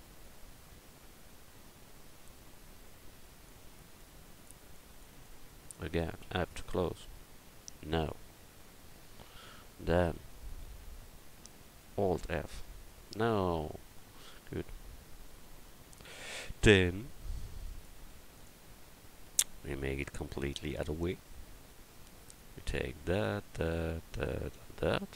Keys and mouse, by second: 6.2 f, 10.7 ctrl+z, 12.3 alt+f, 15.7 alt+f, 16.4 a, 17.6 click, 18.0 x, 20.7-22.2 drag.